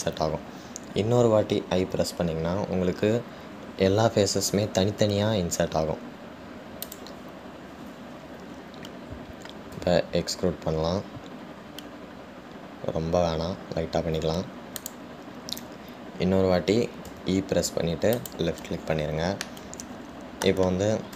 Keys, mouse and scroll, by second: 20.7-21.1 middle drag.